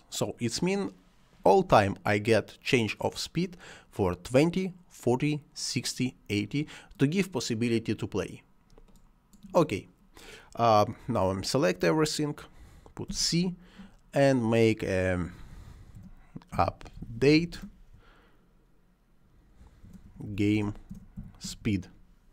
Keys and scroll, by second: 12.9 c, 15.8-17.4 typing, 19.7-21.0 typing, 22.2 d.